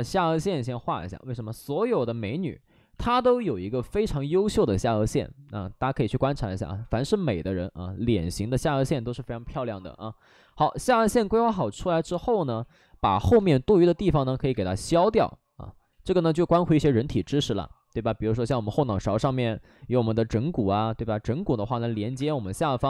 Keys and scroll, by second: 1.1 3, 4.4 ctrl+z, 7.1 ctrl+z, 8.3 alt+s, 10.6 alt+s, 11.3 2, 13.3 space, 14.2 space, 14.4 space, 14.7 ctrl+z, 15.8 ctrl+z, 17.2 space, 22.0 3, 22.1 space, 22.3 3.